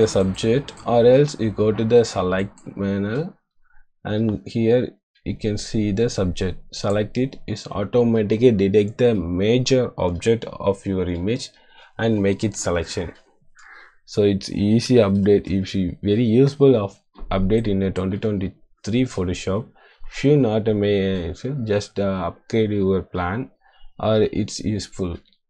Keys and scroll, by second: 15.1 =, 17.0 space.